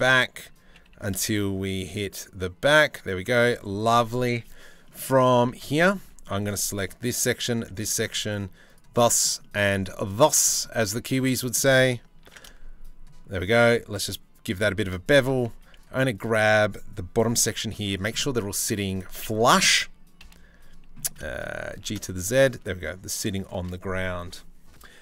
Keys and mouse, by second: 0.3 g, 3.5 Tab, 5.1 Tab, 5.6 2, 11.8 ctrl+b, 15.0 z, 15.5 1, 17.1 c, 19.8 KP_3, 21.3 g.